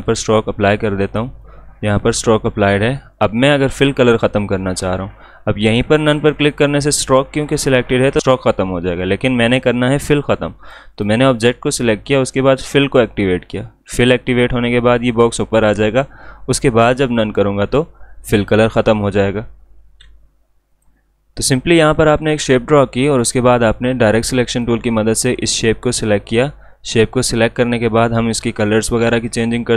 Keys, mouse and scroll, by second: 0.0-4.2 drag, 6.3-8.9 drag, 9.4 ctrl+z, 17.1 click, 19.9 ctrl+z, 20.7 click.